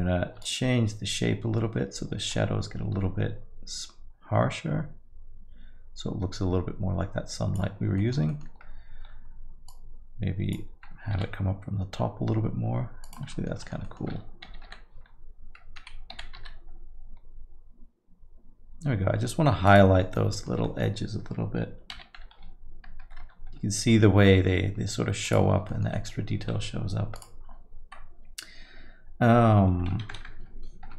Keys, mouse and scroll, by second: 0.4 shift+click, 8.0 alt+middle click, 8.3 middle click, 9.7 click, 11.2 g, 13.3 alt+middle click, 13.6 middle click, 13.8 alt+middle click, 14.5 g, 16.2 g, 20.0 middle click, 20.3 alt+middle click, 20.6 scroll up 1, 20.6 middle click, 21.9 g, 25.7 alt+middle click, 25.9 middle click, 27.2 click, 30.3 KP_0, 30.4 KP_0.